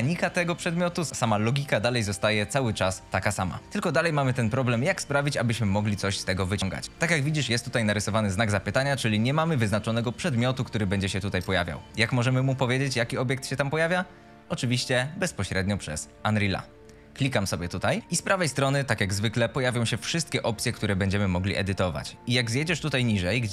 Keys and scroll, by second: 3.6 d, 6.9-7.8 typing, 11.2 Escape, 13.0 a, 13.4 w, 15.5 w, 16.3 e, 18.0 w, 22.8 F2.